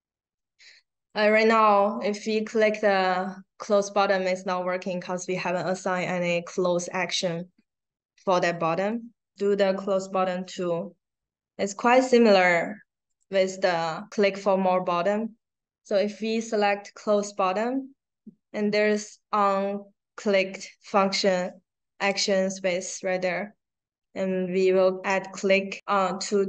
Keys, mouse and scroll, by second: 1.0 click, 1.5 click, 1.6 click, 1.8 click, 2.0 click, 2.5 click, 8.7 click, 12.2 click, 13.0 click, 21.9 click.